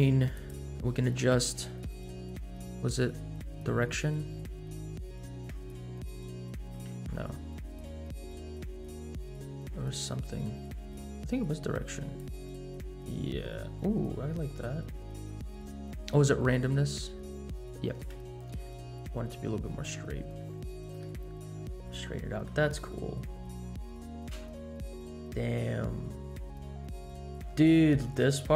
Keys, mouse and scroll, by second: 0.3 click, 5.4-6.8 drag, 7.2 ctrl+z, 12.1-15.3 drag, 17.9-21.0 shift+drag, 21.2-21.8 middle drag, 21.9-22.3 scroll down 2, 22.3 middle click, 22.8-23.6 scroll down 2, 23.6 scroll up 1, 24.3 space, 27.7 scroll up 1, 28.0-28.5 shift+middle drag.